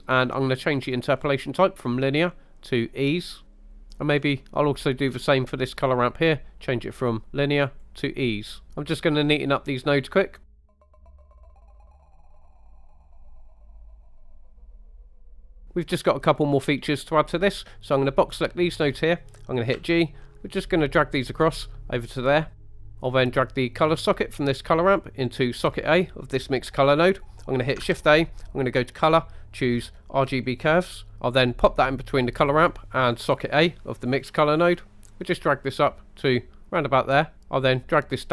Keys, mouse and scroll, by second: 1.1-3.0 drag, 3.5 scroll down 2, 3.7 middle click, 4.1 scroll up 2, 5.9-7.8 drag, 10.5-10.8 scroll up 4, 10.8 click, 11.0 click, 11.2 click, 11.4 click, 11.8 click, 12.2 middle click, 12.4 click, 12.8 g, 13.1 middle click, 13.2 click, 14.0 shift+middle click, 14.4 click, 15.4 middle click, 15.6 middle click, 17.7-18.9 drag, 19.8 g, 22.1 click, 22.6-23.0 scroll up 3, 22.6 middle click, 23.8-25.8 drag, 27.9 shift+a, 33.4 click, 34.7-37.3 drag, 38.1-38.3 drag.